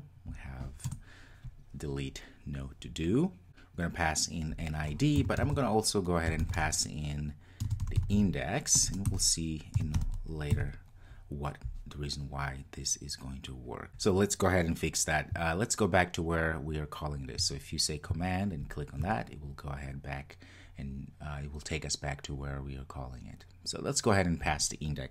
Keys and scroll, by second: 18.7 super+b.